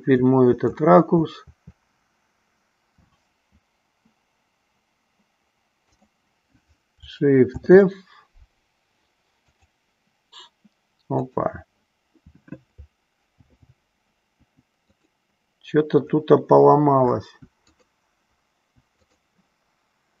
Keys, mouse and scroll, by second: 0.5 Left, 1.1 Left, 1.9 Left, 7.5 shift+f, 13.4 shift+f, 16.9 Up, 17.6 click, 18.5 Down, 19.0-19.5 drag.